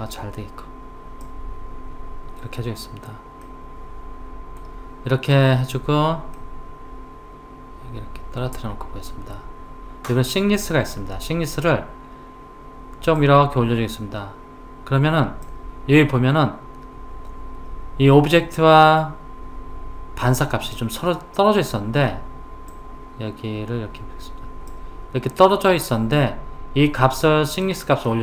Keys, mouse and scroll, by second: 3.5-9.4 middle drag, 13.2 click, 22.7 click, 27.7 click.